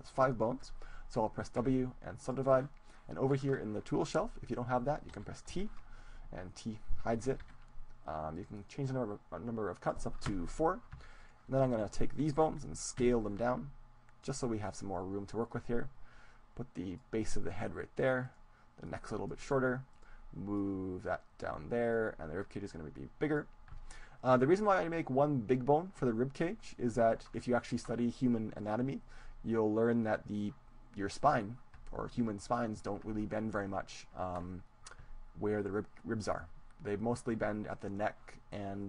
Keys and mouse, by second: 1.5 w, 5.7 t, 7.7 t, 8.3-11.7 drag, 11.1-14.1 right drag, 13.0 s, 14.5-17.5 drag, 18.3-20.7 right drag, 18.9-20.7 drag, 20.7-21.7 middle drag, 21.7 click, 22.0-23.5 middle drag, 23.5-24.9 drag, 25.6-27.7 drag, 28.8-30.4 right drag, 29.5-31.5 drag.